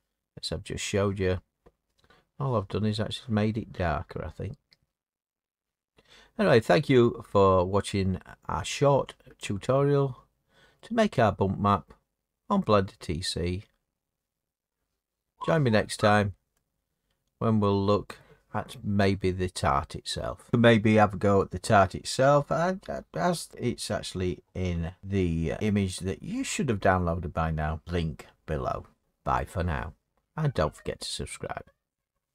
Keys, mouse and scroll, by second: 2.0 middle click, 2.0-2.4 scroll up 4, 3.2 middle click, 6.0 middle click, 6.1-6.9 scroll, 9.4 click, 9.8-10.7 scroll, 16.5 middle click, 17.2 middle click, 19.0 middle click, 20.1 middle click, 20.1 middle click, 27.1-29.6 middle drag.